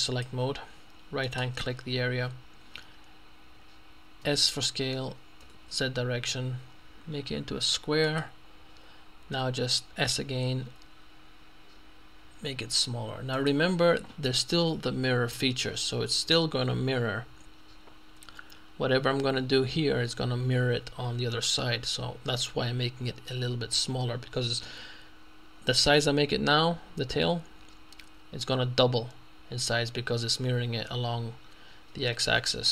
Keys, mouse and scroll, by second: 0.1 click, 1.5 right click, 4.3 s, 5.5 z, 8.1 click, 10.3 s, 13.4 click, 14.0 middle click.